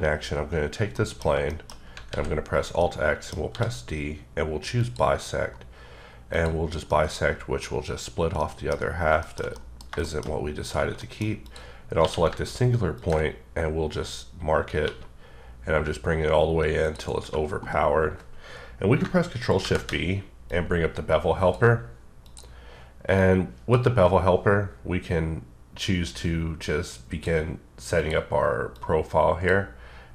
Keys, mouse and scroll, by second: 0.9 middle click, 1.5 double middle click, 2.1 alt+x, 2.8 middle click, 3.3 scroll down 1, 3.5 d, 4.8 click, 6.3 click, 6.8 middle click, 8.4 middle click, 8.8 scroll up 2, 9.2 shift+middle click, 11.0 middle click, 11.4 click, 12.0 q, 12.9 ctrl+click, 13.9-14.5 scroll up 6, 14.8 2, 16.8 click, 19.6 b, 20.4 click, 22.2 click, 23.1 click, 26.6 click, 27.9 click, 28.8 click.